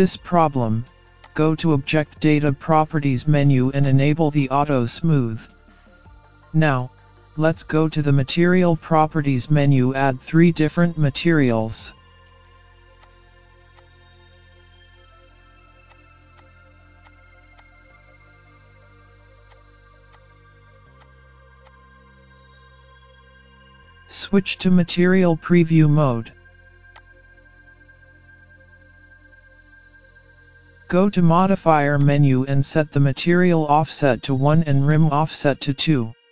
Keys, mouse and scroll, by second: 0.3-0.6 scroll down 2, 1.2 click, 1.9-2.2 scroll down 2, 3.9 click, 5.3 middle click, 9.6 click, 11.5 click, 13.0 click, 15.9 click, 16.3 click, 17.0 click, 19.5 click, 20.1 click, 21.1 click, 27.4 click, 28.9-29.3 scroll up 1, 29.3 middle click, 32.0 click, 34.9 click, 35.7 scroll down 1.